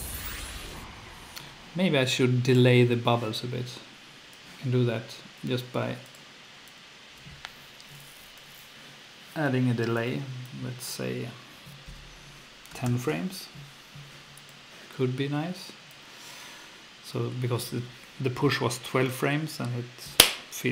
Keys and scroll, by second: 12.5-13.3 typing.